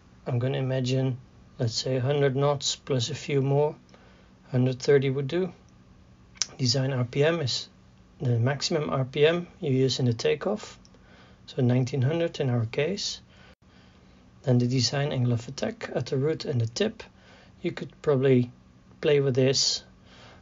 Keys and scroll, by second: 0.8 a, 1.3 d, 11.8 KP_1, 12.1 KP_9, 12.4 KP_0.